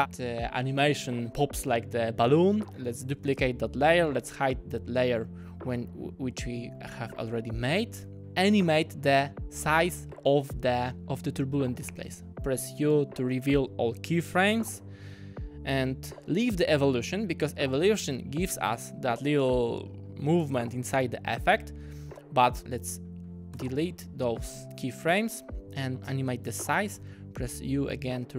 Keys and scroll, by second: 3.1 super+d, 11.8 u, 23.6 BackSpace, 27.0 u.